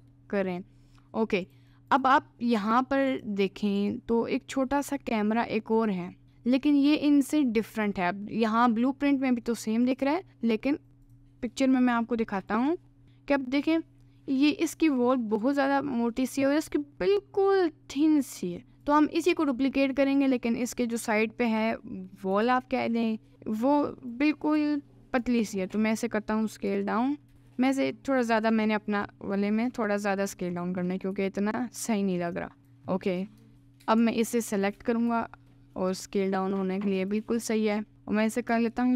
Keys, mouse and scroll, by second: 2.1 click, 3.1 click, 3.8 click, 5.4 alt+middle click, 7.6 click, 9.1 middle click, 9.9 click, 20.1 click, 22.5 shift+d, 24.6 s, 26.7 KP_Decimal, 27.4 s, 30.0 middle click, 30.9 middle click, 31.2 s, 32.6 click, 33.4 Tab, 33.5 middle click, 34.7 alt+click, 35.1 s, 37.0 click.